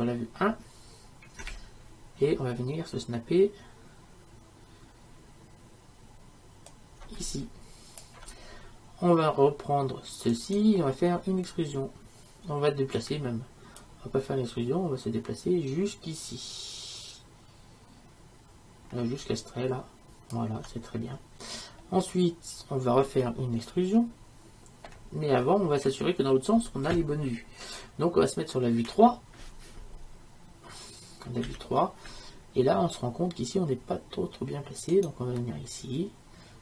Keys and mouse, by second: 1.5 KP_1, 8.0-10.3 drag, 10.3-12.2 right drag, 28.9 KP_3, 34.9-36.6 drag.